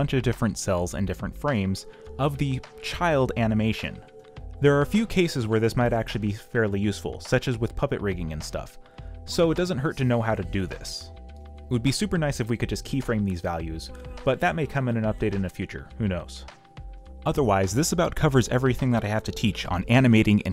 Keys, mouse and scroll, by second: 14.3 ctrl+v, 15.0 ctrl+v, 15.3 ctrl+t.